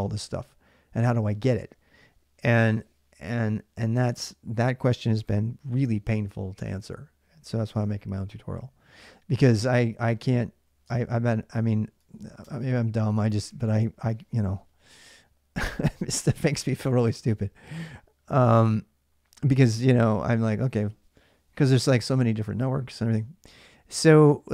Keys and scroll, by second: 7.5 alt+Tab, 8.7 alt+Tab, 10.2-11.0 typing, 12.2 alt+Tab.